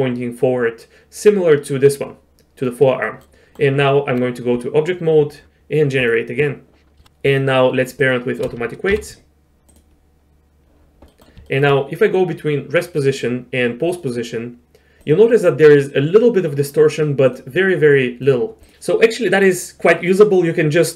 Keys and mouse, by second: 2.6 click, 3.0 middle click, 3.5 middle click, 3.8 Tab, 6.0 click, 7.3 click, 8.1 shift+click, 8.9 ctrl+p, 11.1 click, 11.5 shift+click, 13.9 click, 15.0 click, 17.3-17.7 drag, 18.2 click.